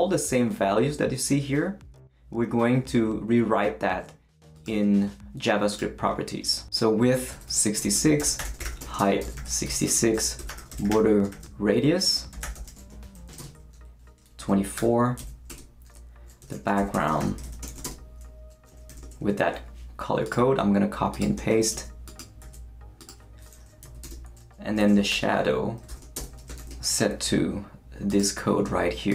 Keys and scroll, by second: 7.1-18.9 typing, 21.7 shift+super+c, 22.4 super+v, 23.8-26.6 typing, 24.0 Return.